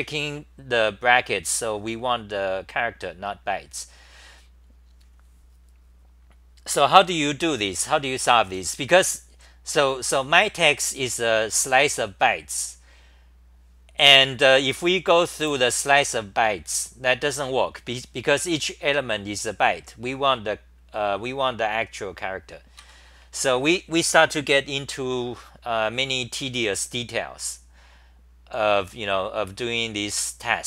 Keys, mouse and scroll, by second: 8.0 c, 8.2 c, 15.3 1, 22.8 ctrl+g, 23.4 c, 25.3 t, 27.4-28.5 scroll down 8, 27.4 typing.